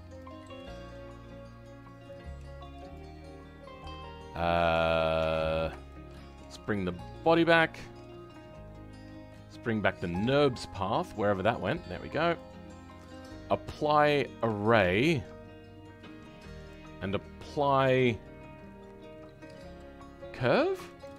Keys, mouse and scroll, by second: 0.3 scroll down 2, 0.5-2.8 middle drag, 2.8 click, 3.1-3.5 scroll down 2, 5.1 Tab, 5.8-7.1 shift+middle drag, 7.1-21.0 drag.